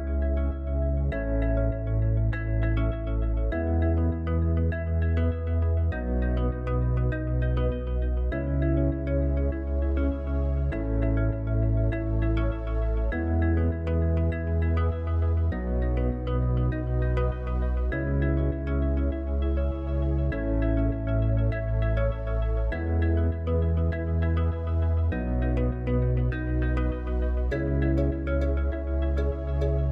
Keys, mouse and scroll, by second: 0.8 click, 3.4-6.4 middle drag, 13.6 click, 22.9 click, 26.0 Tab, 29.5-29.9 right drag.